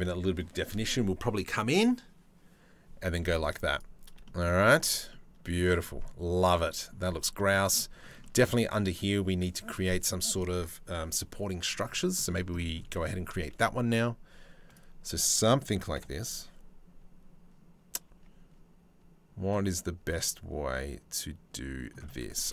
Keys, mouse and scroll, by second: 0.7-3.8 middle drag, 3.8 shift+middle click, 4.7 middle click, 6.2 middle click, 7.0 middle click, 7.8 middle click, 11.6 middle click, 12.2 middle click, 13.1 shift+a, 15.5 KP_7, 17.7 Tab, 19.7-21.5 middle drag, 22.1 s.